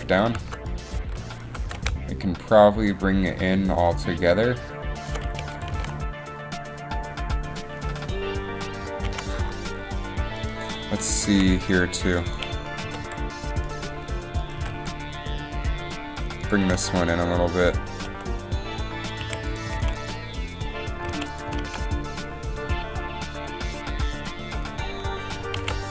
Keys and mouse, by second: 0.7 g, 1.8 g, 5.7 a, 9.3 alt+a, 11.5 a, 12.3 a, 13.0 g, 14.9 g, 16.8 g, 18.2 r, 19.6 a, 21.4 alt+a, 21.7 alt+a, 25.7 alt+a.